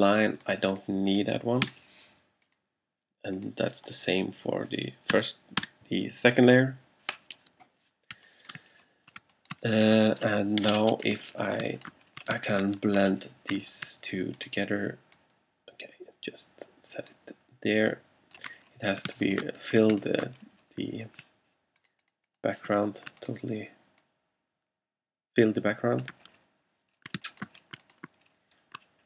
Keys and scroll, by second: 1.7 BackSpace, 5.2 BackSpace, 8.2 space, 8.8 alt+space, 11.7 alt+space, 19.2 alt+space, 27.2 alt+space.